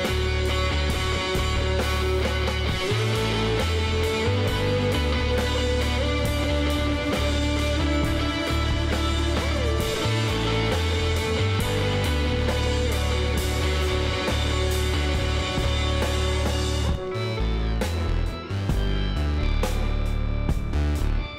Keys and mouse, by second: 4.2-8.0 middle drag, 6.5 e, 11.9 x, 15.2-19.6 drag, 19.1 ctrl+e, 21.2-21.3 drag.